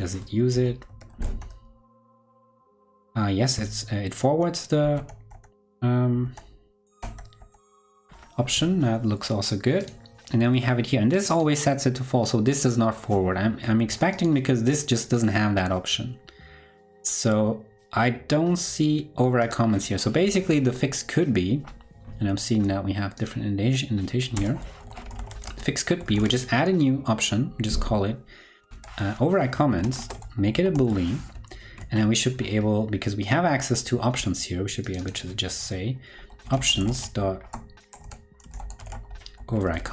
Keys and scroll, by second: 0.5 super+c, 0.8 super+f, 1.0 super+v, 28.6 super+v, 30.8 super+s, 31.2 ctrl+super+Left.